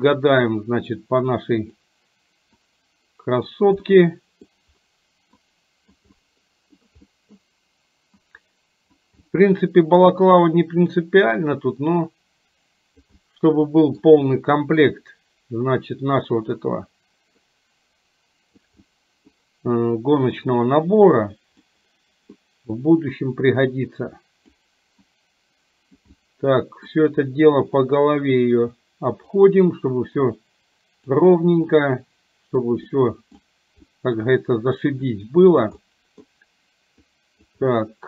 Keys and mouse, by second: 1.0-2.0 drag, 2.6-3.6 drag, 3.9 middle click, 5.5 click, 6.1 middle click, 7.1 middle click, 8.2 click, 9.2 middle click, 10.2-13.1 drag, 13.2 middle click, 17.5-18.7 drag, 18.9 middle click, 20.5-21.7 drag, 22.5 middle click, 23.7 click, 25.1-26.1 drag, 26.2 middle click, 27.9-29.5 drag, 30.2-31.2 drag, 31.7 middle click, 32.9 middle click, 33.9 middle click, 35.2 click, 35.9 middle click, 37.1 click, 37.7 middle click.